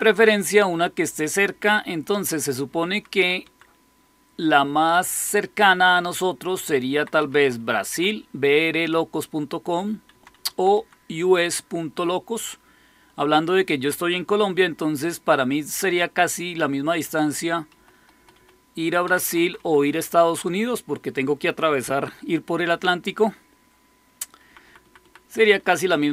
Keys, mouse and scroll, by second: 2.6 Down, 2.8 Down, 3.0 Down, 3.3 Down, 6.6 Left, 7.2 Up, 7.3 Up, 7.5 Up, 7.8 Up, 10.0 Down, 10.3 Down, 10.4 Down, 10.6 Down, 17.6 Up, 17.9 Up, 18.1 typing, 18.3 Up, 19.0 Down, 19.2 Down, 19.3 Down, 19.5 Down, 24.4 Up, 24.6 Up, 24.7 Up, 24.9 Up, 25.3 Down, 25.5 Down, 25.7 Down, 25.9 Down.